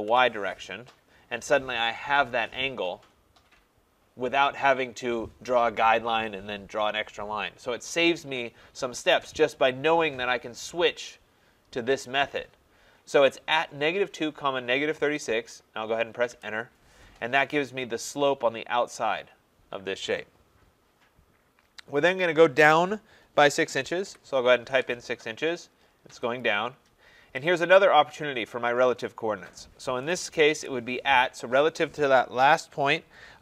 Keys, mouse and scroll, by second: 0.0-0.1 typing, 16.3 Return, 24.1 6, 24.6 Return, 26.4 click, 27.2 middle click, 27.3 middle click, 27.4 middle click, 27.9 middle click, 28.1 middle click, 30.5 @.